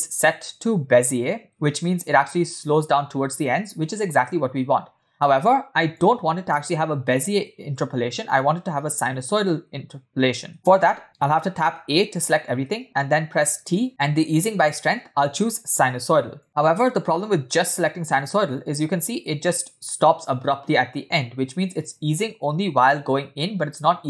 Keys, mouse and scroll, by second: 6.2 click, 7.3 shift+middle click, 8.1 scroll down 4, 10.5 space, 12.3 a, 13.8 t, 17.5 space.